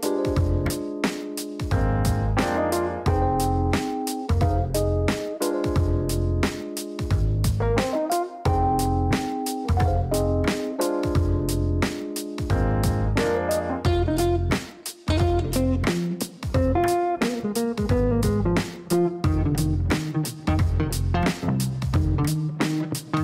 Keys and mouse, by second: 0.0-2.8 typing, 2.9 Down, 3.5 Return, 4.8 click, 6.2 click, 7.2 click, 7.7 click, 8.9 click, 10.2-11.1 typing, 12.7-13.6 typing, 13.6 Down, 14.0 Return, 15.7 click, 16.4 click, 18.0 click, 20.7 click, 22.0 click.